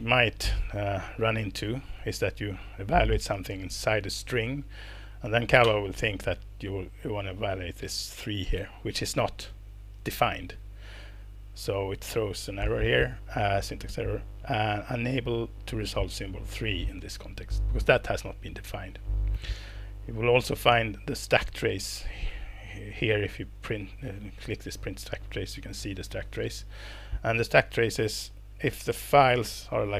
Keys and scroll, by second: 5.6 ctrl+Return.